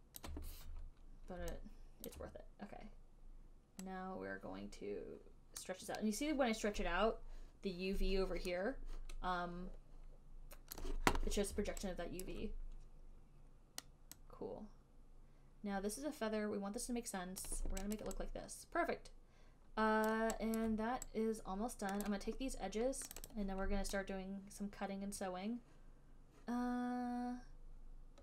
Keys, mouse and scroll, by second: 0.0-1.6 typing, 0.4 click, 2.3 alt+click, 6.4-7.6 alt+drag, 11.0 click, 12.5 click, 12.5 alt+right click, 17.7 click, 18.2 alt+right click, 20.3 alt+right click, 20.9 alt+right click, 22.4 right click, 23.4 right click, 23.6 right click, 23.6 alt+right click, 25.5 alt+click.